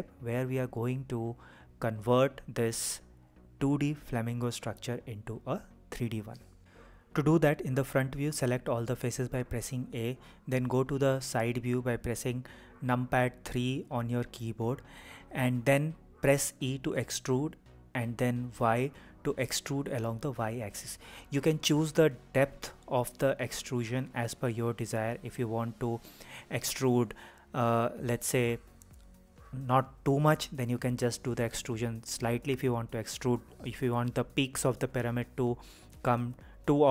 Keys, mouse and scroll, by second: 1.7 Escape, 2.9 click, 3.7 g, 5.4 Escape, 6.6 KP_1, 7.5 a, 13.2 KP_3, 15.5 e.